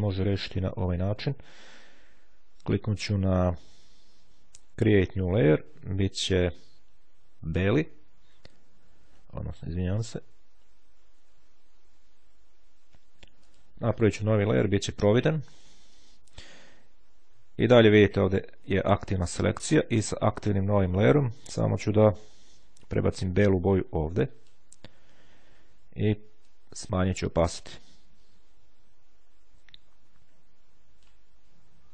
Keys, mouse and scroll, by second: 4.9-5.9 drag, 7.6 click, 10.8 ctrl+z, 13.4 click, 14.7 click, 15.6 click, 20.2 click, 23.1-25.1 drag, 26.4-31.7 drag.